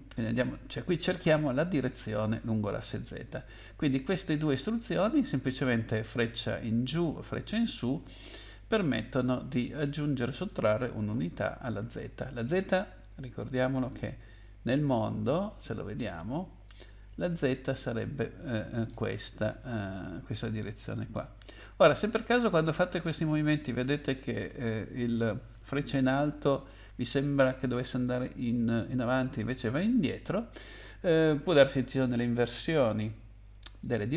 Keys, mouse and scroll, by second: 3.6 click, 5.0 click, 13.9 click, 16.7 click, 17.7 middle click, 21.1 middle click, 33.8 click.